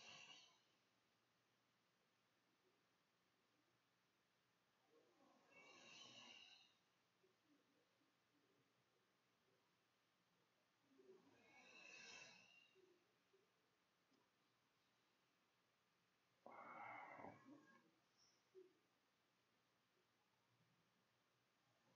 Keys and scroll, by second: 1.0-12.7 typing, 15.0 q, 18.5-20.6 typing.